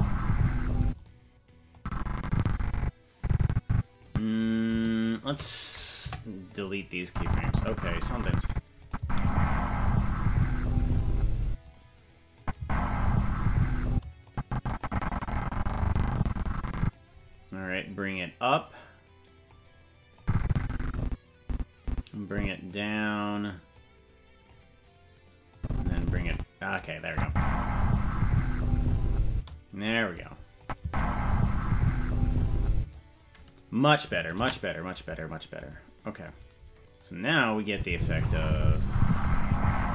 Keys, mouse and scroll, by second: 0.8 space, 1.7-4.0 drag, 4.4-6.0 right drag, 6.0 Delete, 7.0-8.5 drag, 8.8 click, 8.9 space, 11.4 space, 12.4 click, 12.5 space, 13.9 space, 14.3 click, 14.8-17.0 drag, 18.5-19.5 drag, 20.2-22.7 drag, 23.7 click, 25.5-26.7 drag, 27.1 click, 27.2 space, 29.3 space, 30.6 click, 30.8 space, 32.7 space, 36.7 ctrl+s, 37.7 click, 37.9 space.